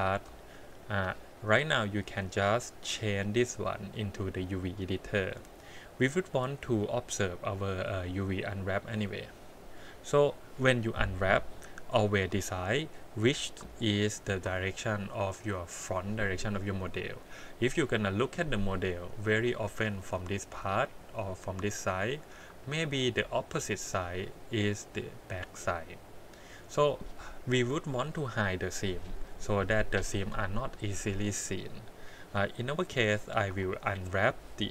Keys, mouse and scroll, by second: 0.0 scroll down 2, 0.4 shift+middle click, 2.9-4.7 drag, 5.7-6.5 scroll up 6, 12.1 2, 12.5 click, 13.5 click, 14.1 alt+click, 17.7 scroll down 1, 18.2 scroll up 1, 18.5 click, 19.3 click, 19.7 middle click, 23.1-24.4 middle drag, 25.2 click, 27.9 KP_1, 29.1 click, 30.0 click, 33.5 3, 33.9 click.